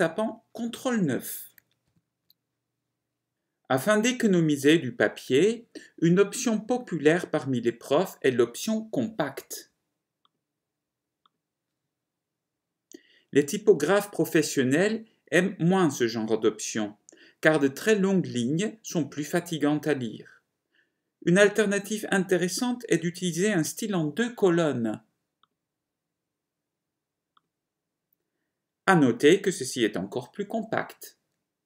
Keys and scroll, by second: 2.1 ctrl+9, 2.3 ctrl+9.